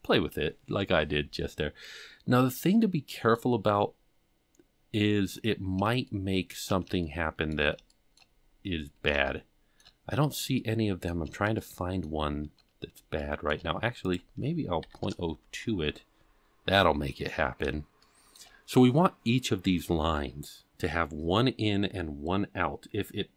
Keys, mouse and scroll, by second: 2.8 middle click, 3.9 scroll up 2, 4.5-4.9 scroll up 4, 5.2 scroll down 6, 6.0 shift+middle click, 7.0 shift+middle click, 7.9 shift+middle click, 8.3-9.8 scroll up 8, 9.2 shift+middle click, 10.2-10.5 scroll down 2, 10.5 shift+middle click, 11.5 shift+middle click, 13.2 shift+middle click, 14.0-16.6 drag, 17.2-18.0 scroll down 3, 18.0 shift+middle click.